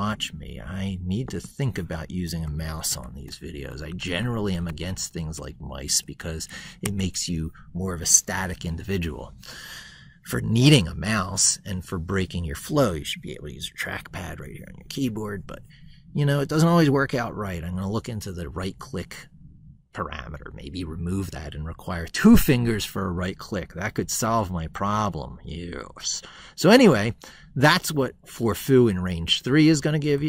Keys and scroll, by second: 3.9 ctrl+Left, 5.0 ctrl+shift+Left.